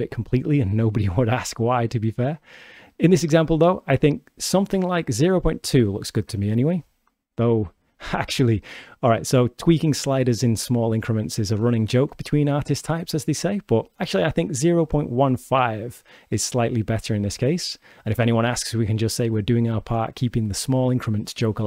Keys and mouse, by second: 3.0 click, 3.8 click, 5.1-6.2 shift+drag, 7.2 shift+middle click, 10.9-12.4 drag, 14.4 click, 15.0 click, 18.7-19.3 drag.